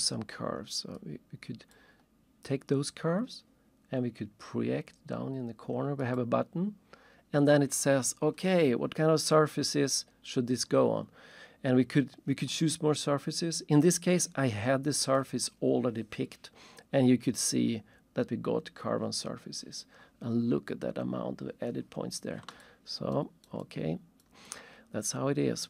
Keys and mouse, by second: 1.0 click, 1.8 click, 6.0 click, 22.5 alt+shift+click, 23.1 alt+shift+right click, 23.7 alt+shift+click, 24.5 alt+shift+click.